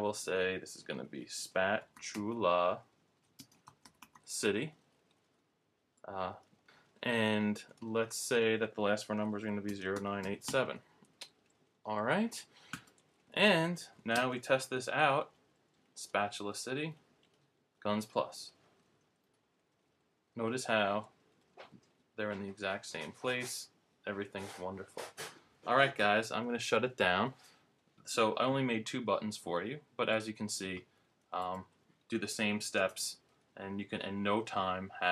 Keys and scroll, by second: 0.8-4.1 typing, 5.3 typing, 9.4-11.0 typing, 12.3 typing, 14.1 super+Return, 32.7 super+Return.